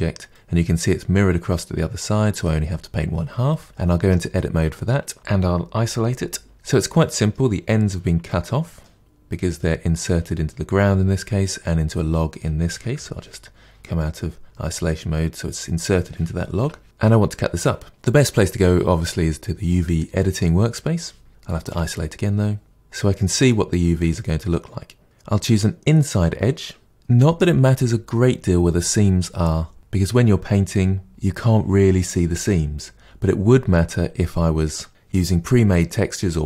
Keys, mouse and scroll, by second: 0.2-3.2 middle drag, 3.4-4.0 middle drag, 4.0 Tab, 4.6-6.0 middle drag, 6.0 KP_Divide, 6.5-12.9 middle drag, 12.9 KP_Divide, 13.9-16.6 middle drag, 16.6 KP_Divide, 16.8-17.9 middle drag, 19.8 click, 21.6 KP_Divide, 22.6-25.0 drag, 25.0-36.4 middle drag.